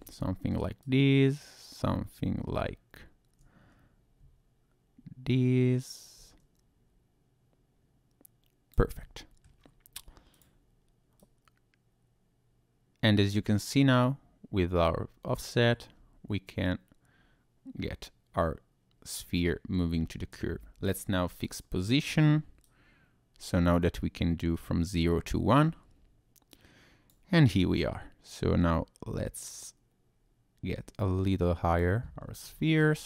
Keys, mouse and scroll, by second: 0.8 click, 9.0 middle click, 10.3 click, 11.2 click, 21.4 click, 22.6 click, 27.5-28.3 scroll up 1, 28.3 click, 28.3-29.1 scroll up 1, 32.2-32.8 scroll down 5.